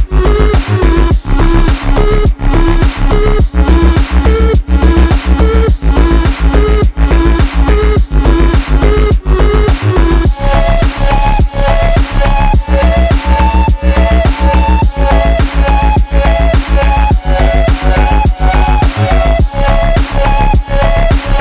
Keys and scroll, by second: 13.6 Return.